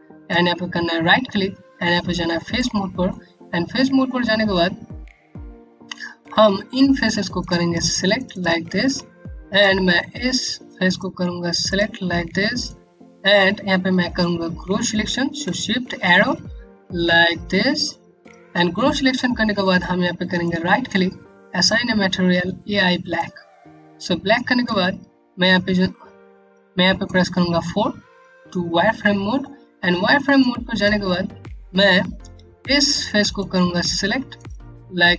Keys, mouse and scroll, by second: 2.7-3.6 scroll up 1, 4.5 scroll down 1, 6.9 click, 7.7 click, 8.4 click, 10.4 shift+click, 11.0 shift+click, 12.2 click, 15.6-16.9 typing, 19.9 typing, 20.1 right click, 23.4 scroll down 1, 24.2 click, 27.2 4, 28.9 scroll up 1, 29.5 scroll down 1, 29.9 alt+click, 30.5 scroll up 1, 31.0 alt+middle click, 32.5 click, 33.0 click, 33.9 click, 34.8 scroll down 1.